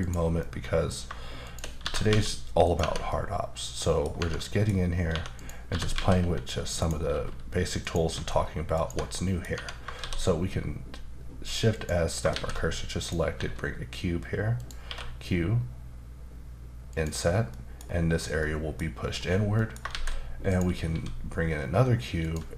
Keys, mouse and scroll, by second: 0.0 click, 0.4 middle click, 1.4 shift+click, 1.8 typing, 2.6 click, 2.8 Tab, 3.1 middle click, 4.2 Tab, 4.4 middle click, 5.4 click, 5.7 typing, 6.8 right click, 7.1 e, 7.8 click, 8.1 s, 8.7 click, 8.8 Tab, 9.1 middle click, 9.5 Tab, 10.0 shift+s, 11.7 click, 12.3 shift+a, 13.0 click, 13.3 s, 14.6 click, 14.8 q, 16.9 click, 17.5 middle click, 17.8-18.4 scroll up 2, 18.4 middle click, 19.1-19.5 scroll down 2, 19.5 middle click, 19.9 shift+a, 20.5 click, 20.9 s, 22.2 click.